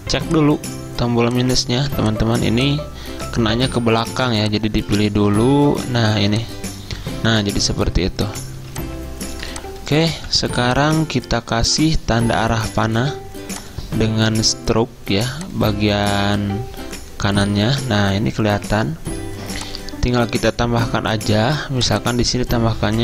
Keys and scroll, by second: 1.9 v, 3.7 ctrl+2, 5.7 -, 8.7 z, 10.0-10.8 typing, 22.9-23.0 typing.